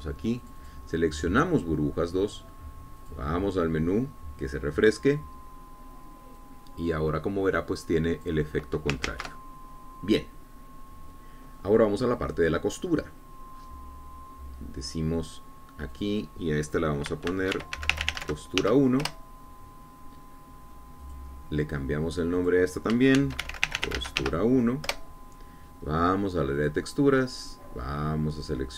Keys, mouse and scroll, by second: 0.2 click, 1.6 click, 4.2 click, 7.6-9.7 drag, 10.3 ctrl+z, 14.8 scroll up 2, 16.5 click, 17.1 click, 18.5-19.8 typing, 20.3 shift+Return, 22.3 click, 23.6 click, 24.4-25.4 typing, 26.2 Return, 27.8 click.